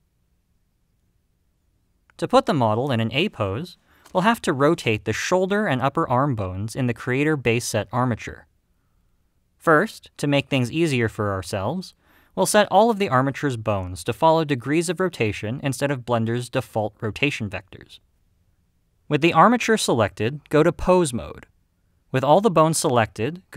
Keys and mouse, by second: 20.6 click, 21.9-23.3 drag.